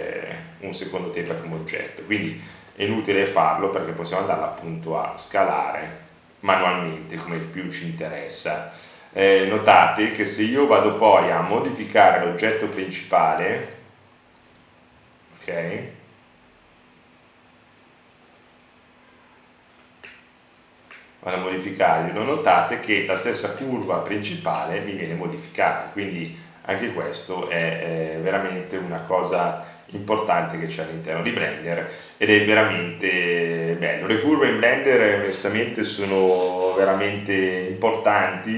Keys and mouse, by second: 0.4 Tab, 4.7 Tab, 6.4 KP_Decimal, 38.3 click.